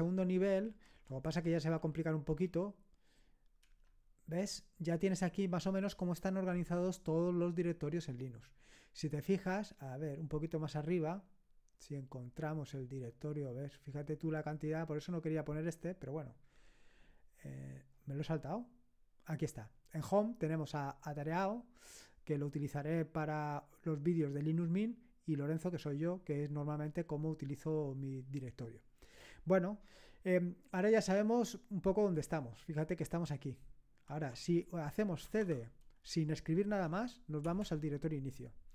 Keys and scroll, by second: 0.1 Up, 0.7 Left, 0.9 Left, 1.1 Left, 1.3 Left, 1.7 Delete, 2.4 2, 3.7 Return, 35.3 typing, 37.5 Return.